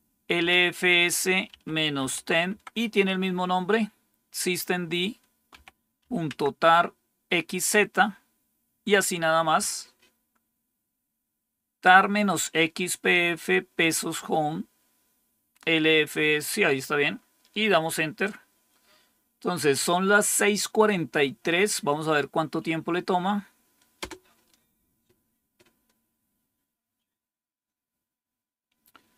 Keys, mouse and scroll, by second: 0.0-2.6 typing, 5.4-5.9 typing, 6.2 Tab, 23.9 Return.